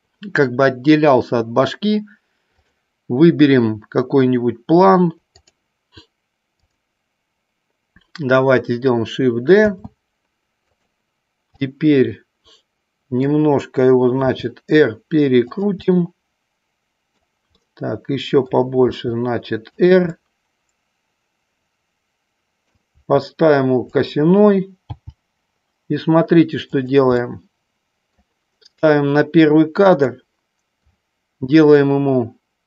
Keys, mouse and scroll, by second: 2.5 click, 5.3 click, 6.7 click, 9.8 shift+d, 11.8-13.3 middle drag, 14.2 r, 15.9-17.4 middle drag, 17.8-18.6 middle drag, 19.1 r, 20.3-22.8 middle drag, 23.0 r, 24.0 click, 25.1 g, 26.8 click, 27.3 scroll up 1, 27.4 middle click, 28.3 scroll down 1, 30.1 click.